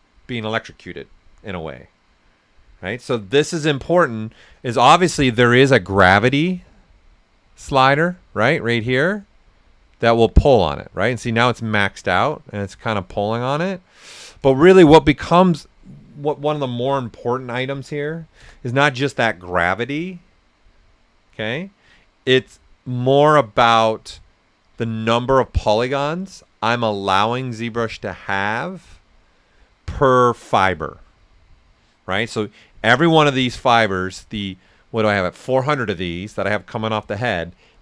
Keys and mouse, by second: 6.0-11.6 drag, 11.6 right click, 15.4 click, 17.5-18.2 typing, 18.4 Return, 32.8 click, 33.7 right click.